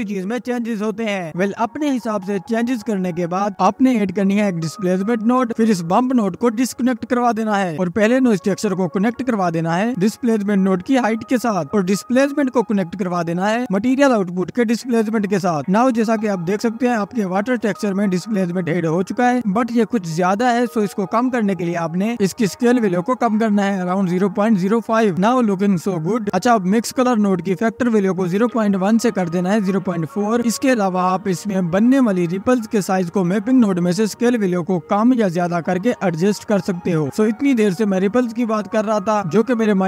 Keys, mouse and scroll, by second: 0.0 ctrl+s, 0.8 click, 1.0 space, 1.7 click, 3.5 shift+a, 6.3 scroll up 1, 6.5-7.2 middle drag, 7.2-7.5 drag, 7.7-8.9 scroll down 9, 9.0-10.5 drag, 12.0 click, 12.6-14.2 scroll up 8, 13.0 middle click, 16.7 scroll up 1, 17.0-17.4 scroll down 1, 17.4 space, 18.3 space, 19.6 middle click, 20.0-21.3 scroll up 9, 21.3-22.0 drag, 27.6-29.5 scroll up 6, 27.8 middle click, 29.5 click, 29.6 space, 33.0-33.5 scroll up 1, 33.5 middle click, 33.9-34.4 scroll down 12, 34.4 middle click, 34.8-35.4 scroll up 9, 35.4-38.0 drag.